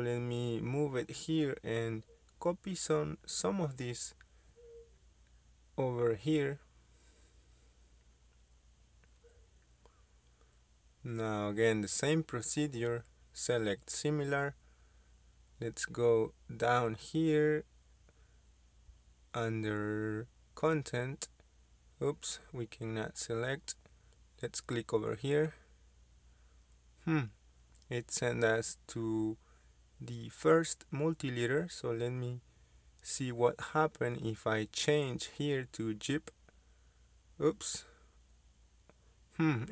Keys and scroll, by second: 0.8 m, 0.9 space, 4.2-5.1 typing, 7.9 Escape, 34.3-35.6 typing.